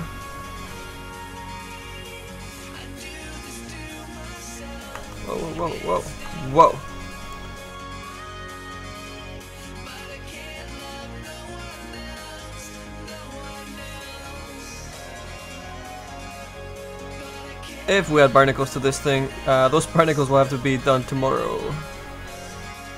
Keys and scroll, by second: 13.4 s, 15.3 s.